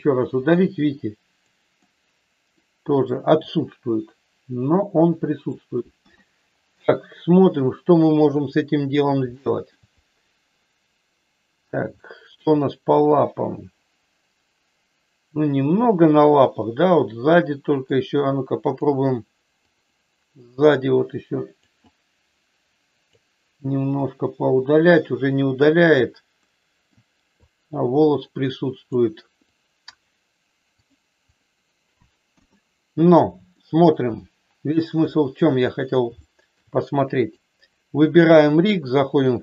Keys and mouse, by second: 0.5 click, 1.8 middle click, 3.4-5.5 drag, 5.9 KP_1, 7.5-8.7 drag, 9.3 shift+middle click, 11.9 shift+middle click, 12.9-17.8 middle drag, 18.7-19.8 drag, 20.7-21.7 drag, 21.9-23.0 drag, 24.0-25.5 drag, 26.4 middle click, 27.4-28.9 drag, 29.4 click, 30.8 click, 32.4 KP_1, 33.5 shift+middle click, 35.0 shift+middle click, 36.2 shift+middle click, 38.5 click.